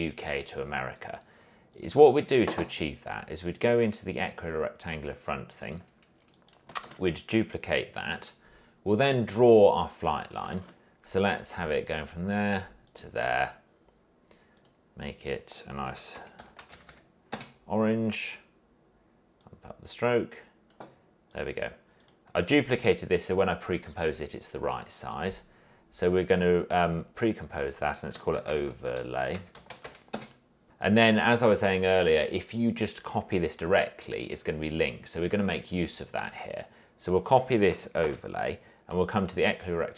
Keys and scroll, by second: 7.0 ctrl+d, 10.7 ctrl+shift+a, 15.8-17.5 typing, 28.3-30.6 typing, 38.2 ctrl+c.